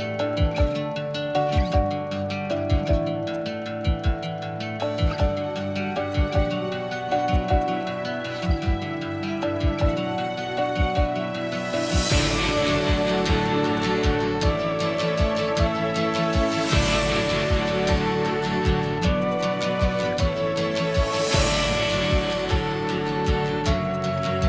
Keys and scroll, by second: 0.0-1.1 typing, 3.1 space, 4.2 m, 7.0 space, 8.2 m, 14.6 ctrl+g, 15.8 r, 17.8-19.1 typing, 20.1 ctrl+g, 22.1 Escape, 23.5 m.